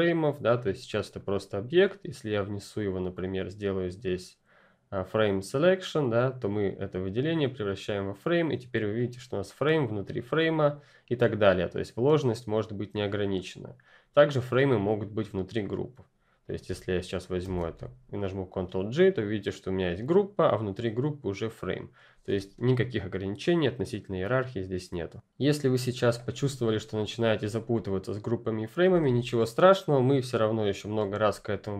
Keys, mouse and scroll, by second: 3.1 right click, 6.0 right click, 6.0 click, 8.9 click, 12.3 click, 16.6 click, 17.4 ctrl+g, 18.8 click, 26.4 ctrl+F10, 26.5-27.4 ctrl+scroll down 1, 27.4-27.8 scroll down 1, 27.8 click, 28.8 Delete, 30.9 space, 31.2 click, 31.4 space.